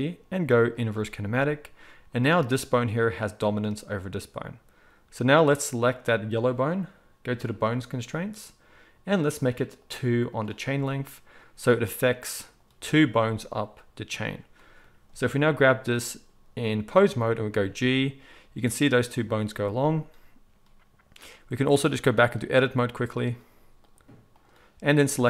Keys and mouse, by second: 0.8-2.4 middle drag, 2.4 click, 2.5-7.4 middle drag, 7.4 click, 7.5-9.8 middle drag, 9.8-12.5 drag, 12.5-21.7 middle drag, 17.5 g, 21.7-25.1 drag, 25.1-25.2 middle drag.